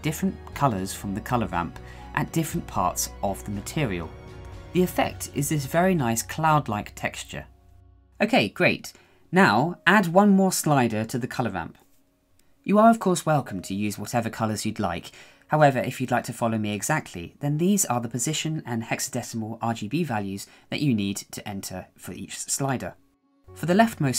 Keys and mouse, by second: 9.1 shift+middle click, 10.9 click, 12.5 click, 13.9-15.0 drag, 15.0-17.4 right drag, 22.9 right click, 23.8 right click.